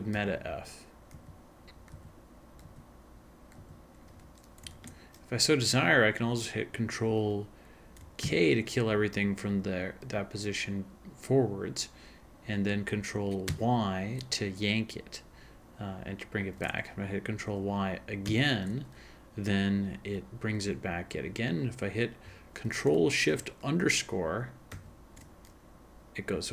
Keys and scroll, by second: 0.2 alt+f, 1.9 alt+f, 2.0 alt+f, 2.6 alt+f, 4.9 ctrl+f, 8.3 ctrl+k, 13.5 ctrl+y, 18.3 ctrl+y, 24.7 ctrl+shift+-.